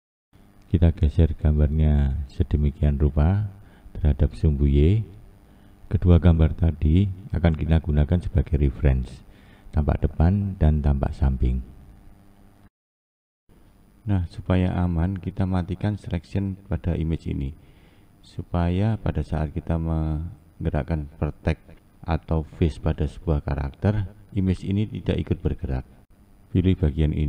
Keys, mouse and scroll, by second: 7.5 click, 9.0-12.8 scroll down 1, 13.2 ctrl+space, 13.8-14.1 scroll up 1, 14.8-18.8 scroll up 8.